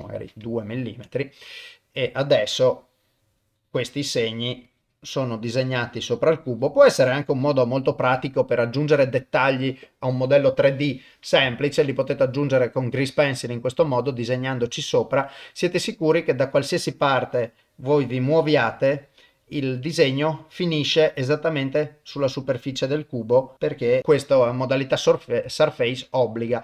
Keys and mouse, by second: 0.6 ctrl+middle click, 1.1 middle click, 2.2-4.4 drag, 4.7 click, 5.6 click, 6.3 click, 7.2 click, 7.8 middle click, 8.3 ctrl+middle click, 8.7 middle click, 11.6 ctrl+middle click, 12.1-13.7 middle drag, 13.9 ctrl+middle click, 14.5-15.5 middle drag, 16.1 click, 17.0 click, 18.0 click, 18.9 click, 19.5-21.9 middle drag, 22.4 click, 23.5 click, 23.7 click, 24.3-25.4 middle drag, 25.6 ctrl+middle click, 26.1 middle click.